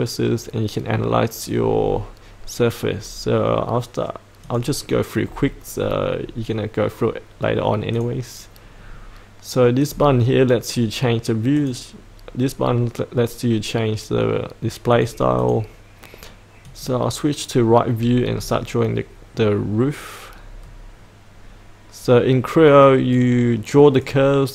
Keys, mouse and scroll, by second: 4.4 click, 5.7-6.2 scroll up 1, 6.2-7.5 scroll down 1, 7.9 click, 8.7-9.8 scroll down 1, 9.8 click, 17.9-18.3 scroll down 1, 23.1-24.3 drag.